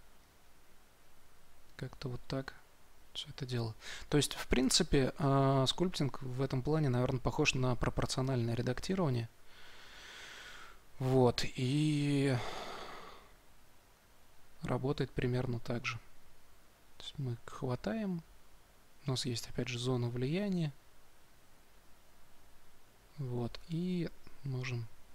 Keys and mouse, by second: 16.5-19.3 drag, 19.3 f, 20.4-23.5 drag, 23.5 shift+f.